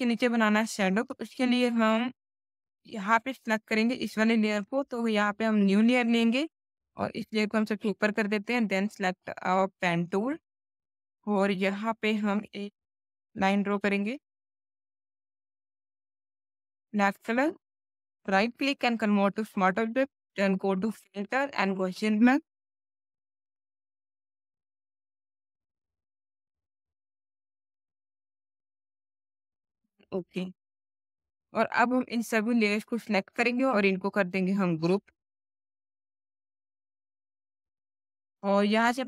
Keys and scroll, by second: 36.6 ctrl+g, 37.3 space.